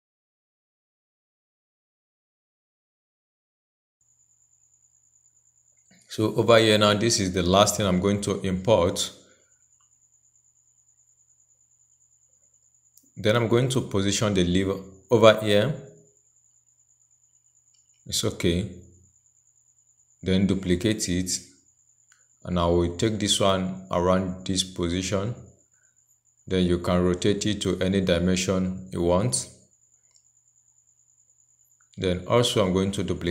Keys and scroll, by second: 20.8 ctrl+j, 33.1 ctrl+j.